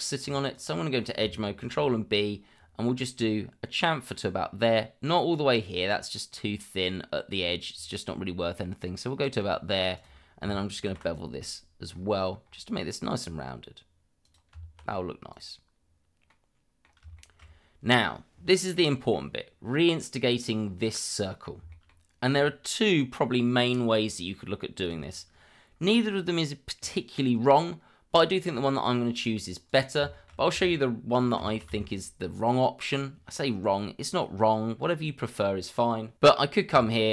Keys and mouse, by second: 0.5 click, 1.6 ctrl+b, 9.9 click, 10.8 ctrl+b, 14.5 Tab, 15.3 click, 16.3-16.8 middle drag, 17.2 shift+middle drag, 18.7-19.1 middle drag, 20.9-21.4 middle drag, 21.7 shift+middle drag, 29.6 middle click, 29.9 click, 30.2 shift+middle click, 31.4 shift+d, 32.9 z, 36.7 Tab.